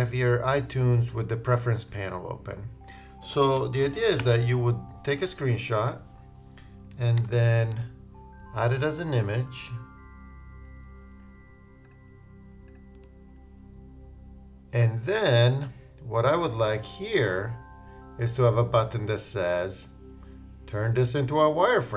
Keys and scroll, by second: 3.8 shift+super+4, 4.2 shift+super+space.